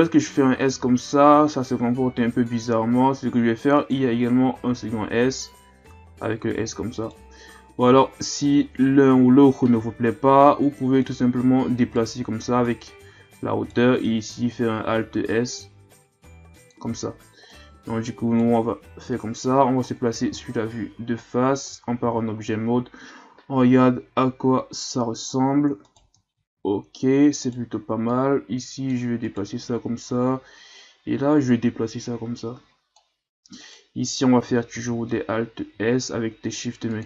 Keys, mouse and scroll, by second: 4.7 alt+s, 8.0-8.6 shift+scroll up 2, 8.6-9.1 ctrl+scroll down 1, 9.3-10.5 scroll up 1, 11.0 right click, 12.6 right click, 14.2 alt+s, 17.5 right click, 19.0 KP_1, 19.9-20.3 scroll down 4, 20.3 a, 20.6-20.9 scroll down 1, 20.9 a, 21.7 Tab, 22.0 a, 22.6-23.3 ctrl+scroll up 1, 23.3-24.0 scroll up 2, 25.4-25.8 scroll up 3, 25.8 right click, 26.5 Tab, 27.4 right click, 28.1-29.2 drag, 29.2 right click, 30.8-33.6 drag, 33.6 right click, 34.7 alt+s.